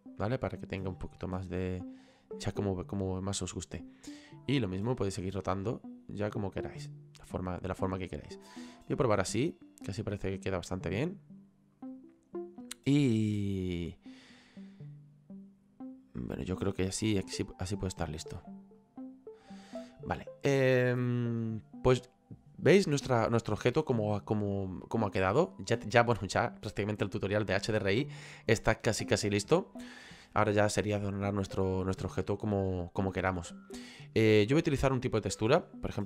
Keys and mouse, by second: 1.1 click, 2.9 click, 4.3 click, 17.0 click, 18.8 click, 31.2 click, 31.9 right click, 35.1 right click.